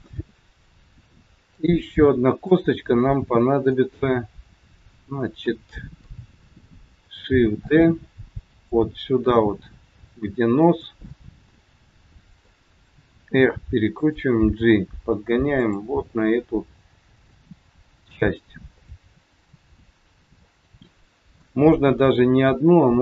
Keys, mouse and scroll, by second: 1.5 click, 2.3 click, 3.6 middle click, 6.0 KP_3, 7.6 shift+d, 9.6 r, 11.1 middle click, 13.1 r, 14.6 g, 16.1 middle click, 18.7 middle click, 21.3 KP_1.